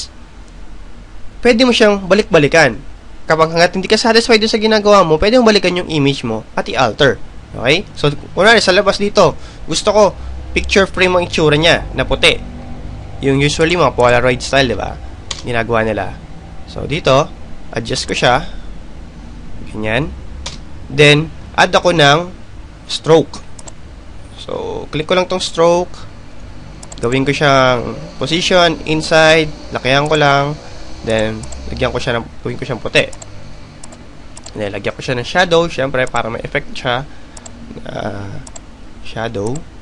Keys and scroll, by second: 18.9 Return, 24.5 Return.